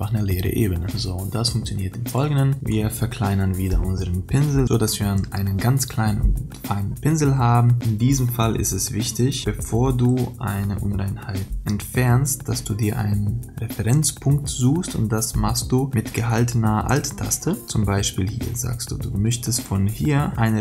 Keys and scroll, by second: 8.6 ctrl+=.